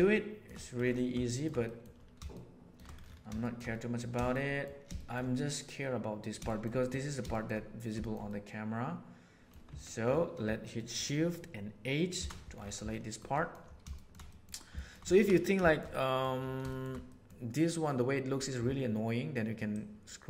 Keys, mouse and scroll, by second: 0.1 shift+middle click, 1.2 shift+middle click, 1.6 middle click, 2.3 shift+middle click, 3.4 shift+middle click, 3.7 middle click, 4.1 shift+middle click, 4.4 middle click, 4.9 shift+middle click, 6.3 shift+middle click, 7.3 shift+middle click, 7.9 shift+middle click, 8.2-9.4 middle drag, 9.7 Tab, 10.7-12.1 middle drag, 12.1 shift+h, 12.9 middle click, 13.3-14.1 middle drag, 14.2 middle click, 14.6 shift+middle drag, 15.0 ctrl+middle drag, 15.6-16.2 shift+middle drag, 16.6 shift+middle drag, 17.0 middle click, 19.7 click.